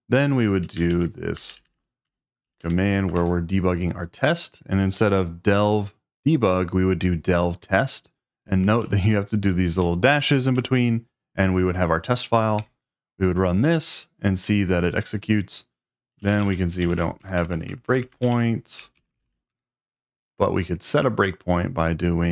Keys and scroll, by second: 0.9 ctrl+r, 1.5 typing, 2.4 Page_Down, 2.6 Page_Down, 3.1 Return, 8.8 Left, 9.3-9.8 Left, 9.8 Right, 10.0 Right, 10.1 Right, 10.2 Right, 12.6 Return, 15.9-20.2 typing.